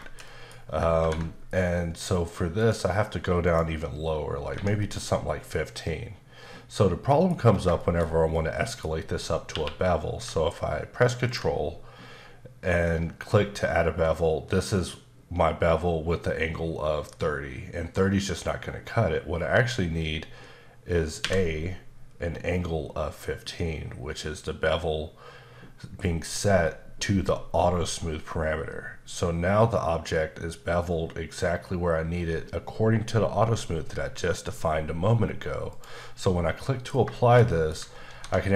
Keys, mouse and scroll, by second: 0.0 shift+middle click, 0.5 scroll up 1, 2.1 click, 2.5 click, 3.4 click, 4.8 middle click, 7.4 scroll up 1, 7.7 shift+middle click, 9.5 q, 11.2 ctrl+click, 13.3-13.8 scroll up 2, 21.2 a, 35.7 click, 36.2 middle click, 37.1 middle click.